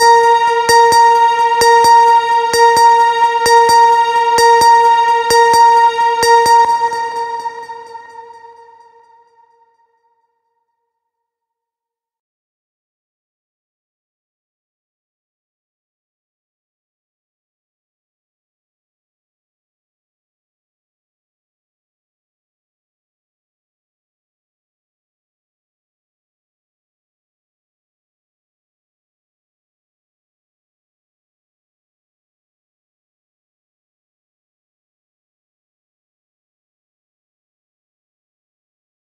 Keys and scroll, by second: 6.0 space, 17.6 ctrl+a.